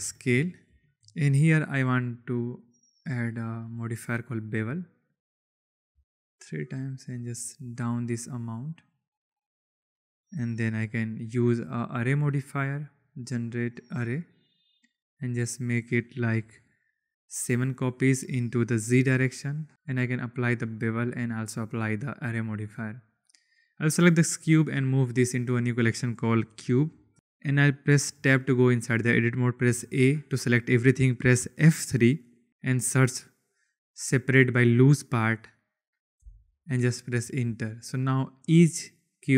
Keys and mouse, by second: 0.1 shift+drag, 0.8 shift+drag, 2.6-4.0 drag, 4.9 click, 5.4 click, 6.1-8.7 shift+drag, 9.0 click, 9.9 click, 12.3-14.0 drag, 16.5-17.5 drag, 18.4 click, 19.5 click, 20.2-20.6 drag, 21.0-21.7 drag, 23.2 click, 24.3 m, 28.2 Tab, 29.6 a, 32.5 F3, 37.2 click, 37.4 Tab, 38.3 click, 38.7 click, 39.2 click.